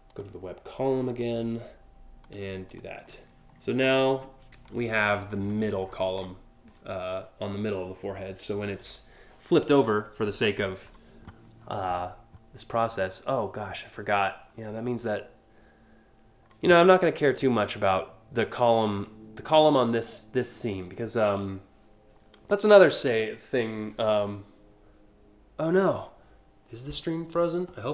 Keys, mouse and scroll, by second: 0.7 click, 1.9 click, 2.3 click, 3.2-4.2 scroll up 2, 4.3-5.1 scroll up 4, 5.5-5.9 scroll down 5.